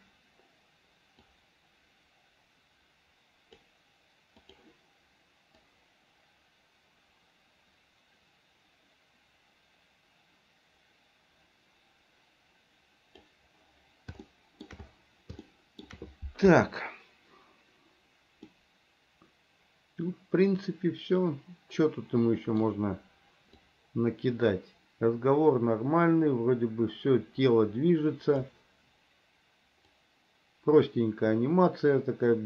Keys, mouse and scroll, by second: 1.5-3.9 drag, 4.7 click, 5.9-13.5 drag, 14.4 shift+middle click, 15.6 shift+middle click, 18.7-22.8 middle drag, 23.9-28.7 drag, 30.2-32.4 drag.